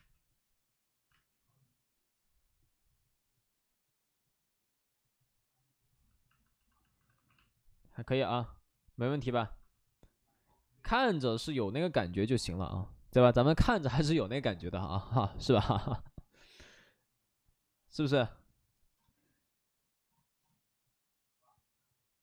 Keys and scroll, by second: 1.0 space, 6.9 alt+s, 7.1 alt+s.